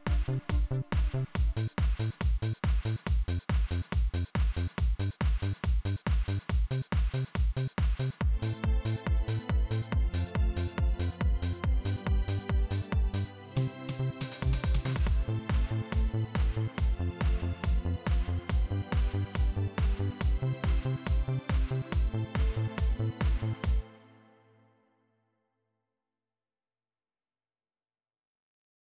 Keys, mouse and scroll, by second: 4.2-5.5 drag, 11.5-14.5 drag, 15.4-16.9 drag, 17.8-20.3 drag, 23.3 space, 25.0 click, 26.2 click, 28.0 click.